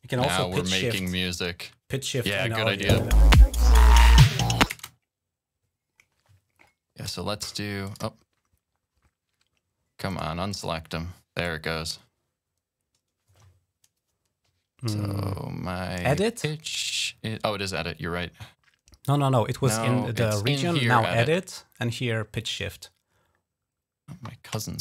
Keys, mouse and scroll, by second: 1.8 click, 2.7 typing, 4.5 space, 5.2 click, 6.4 click, 7.0 right click, 7.7 click, 8.4 click, 9.2 right click, 9.9 click, 10.3 click, 11.2 right click.